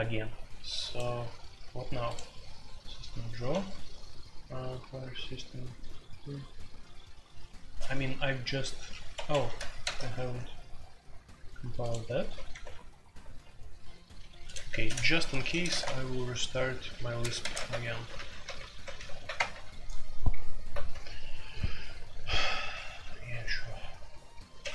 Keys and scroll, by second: 3.5 Escape, 9.1 Escape, 9.3 F2, 9.8 ctrl+c, 10.0 ctrl+c, 12.5 typing, 14.5-15.8 typing, 17.4 Return, 17.4 ctrl+c, 17.5 alt+o, 18.1 alt+p, 18.2-18.9 typing, 19.3 Return, 24.6 alt+p, 24.6 0.